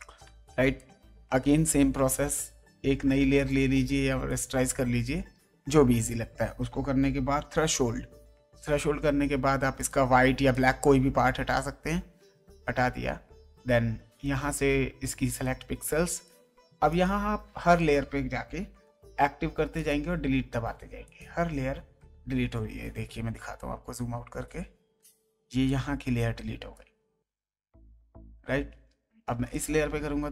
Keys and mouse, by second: 0.2 space, 0.7 click, 1.6 ctrl+space, 3.3 click, 4.3 ctrl+click, 4.7 ctrl+e, 7.4 alt+a, 7.7 alt+t, 9.8 click, 10.0 w, 10.5 click, 11.8 Delete, 12.9 ctrl+d, 14.2 right click, 19.0 Delete, 19.7 click, 20.5 Delete, 21.0 click, 21.6 Delete, 24.9 space, 25.6 click, 29.5 click, 30.0 Delete.